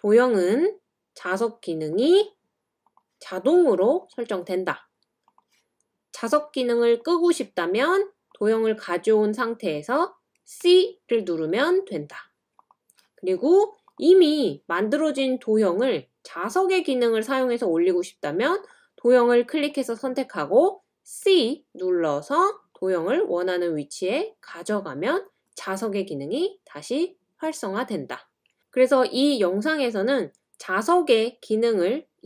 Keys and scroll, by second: 10.3-11.9 typing.